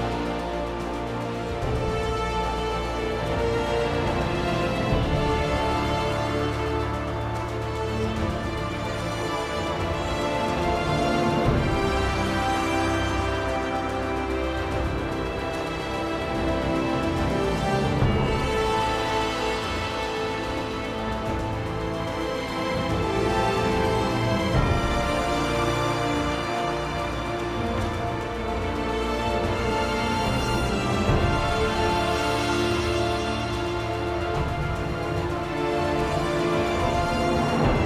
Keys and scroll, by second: 1.9 Return.